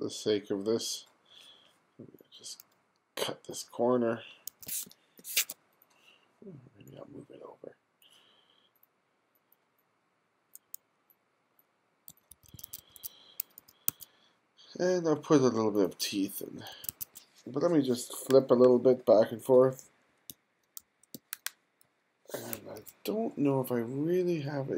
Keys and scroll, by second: 4.6 2, 4.9 space, 12.4 1, 13.6 2, 13.9 1, 16.8 1, 19.6-22.6 typing.